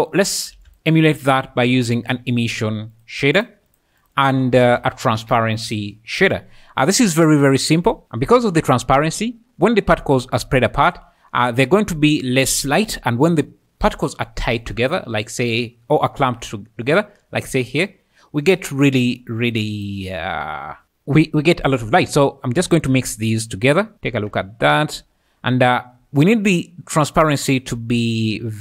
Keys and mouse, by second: 0.5 shift+a, 2.0 s, 3.8 click, 4.1 click, 4.3 x, 4.6 shift+a, 7.4 click, 26.5-28.6 drag.